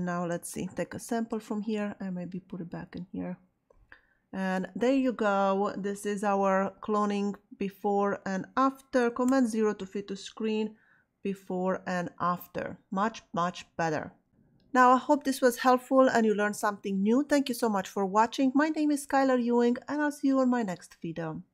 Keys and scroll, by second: 9.2 super+0.